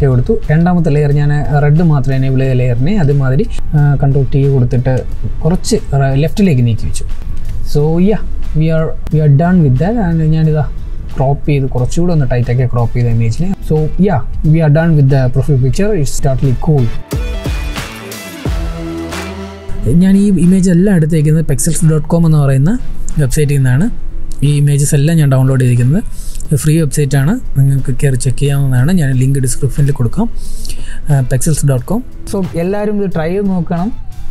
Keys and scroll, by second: 3.4 ctrl+t.